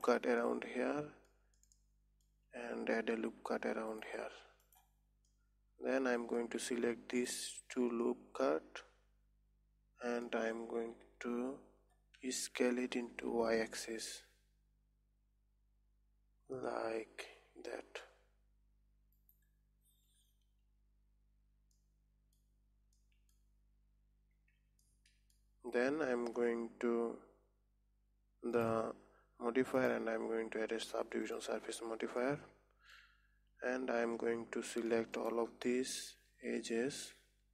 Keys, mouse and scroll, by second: 1.0-3.8 middle drag, 3.8 ctrl+r, 5.8-7.6 middle drag, 7.6 alt+shift+click, 8.6-11.4 middle drag, 11.4 KP_3, 12.7 s, 20.4-21.5 scroll down 2, 22.2-24.8 middle drag, 24.8 Tab, 25.3-28.4 middle drag, 29.0 click, 31.8-32.8 drag, 32.8-33.9 middle drag, 33.9 Tab, 34.7-35.2 scroll up 2, 35.6 alt+shift+click, 36.5 alt+shift+click, 37.1-37.5 middle drag.